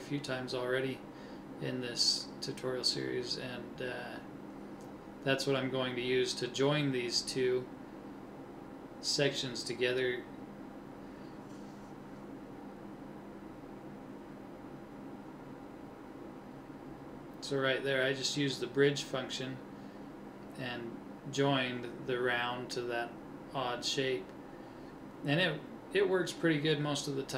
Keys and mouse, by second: 0.3-2.2 middle drag, 2.2 ctrl+Tab, 6.0 click, 6.1-8.4 right drag, 17.3 middle click, 20.2-22.2 middle drag, 22.4 middle click, 25.0 KP_3.